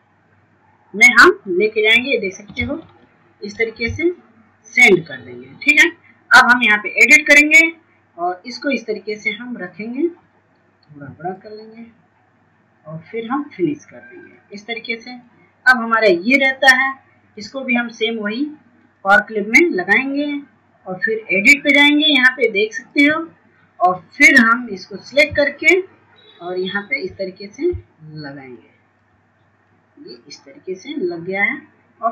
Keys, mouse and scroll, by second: 3.5-9.7 drag, 10.4-19.2 shift+drag, 25.6 shift+click, 28.1 shift+click.